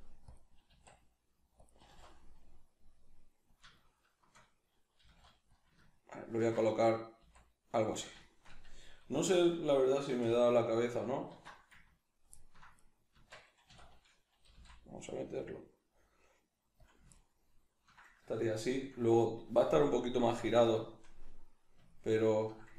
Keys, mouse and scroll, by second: 0.4 click, 0.7 s, 1.7 click, 1.8 g, 3.6 click, 3.7-5.6 shift+middle drag, 5.0 g, 5.6 click, 5.8-8.0 ctrl+middle drag, 7.2 s, 8.0 click, 8.2-13.5 shift+middle drag, 9.5 a, 10.2 \, 11.3 alt+q, 12.8 right click, 13.1 Tab, 13.6 a, 16.8 click, 17.1-22.7 ctrl+middle drag.